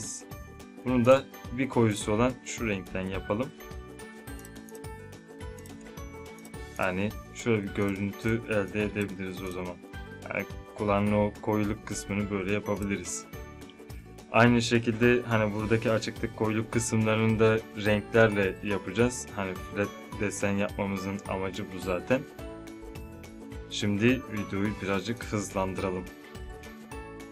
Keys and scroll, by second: 11.9 z.